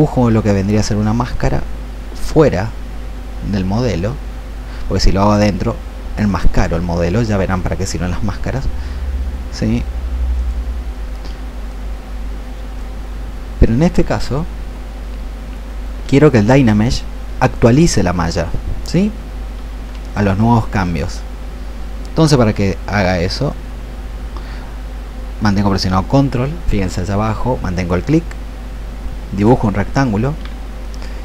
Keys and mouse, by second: 0.1-5.3 ctrl+drag, 11.5-13.2 drag, 17.7-20.4 drag, 23.5-29.5 ctrl+drag, 31.0-31.2 drag.